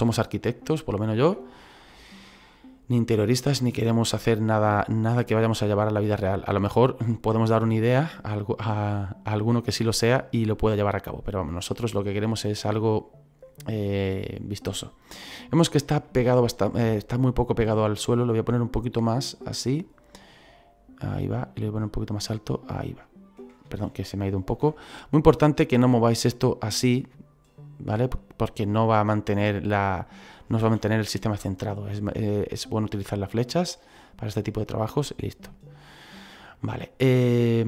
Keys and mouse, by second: 0.8 click, 3.4 click, 4.5 click, 8.6 click, 10.9 middle click, 16.1 middle click, 17.9 click, 19.6 click, 22.0 click, 24.5 ctrl+z, 24.8 middle click, 25.9 click, 30.6 ctrl+z, 31.2 middle click, 32.8 click, 33.6 middle click, 37.3 middle click.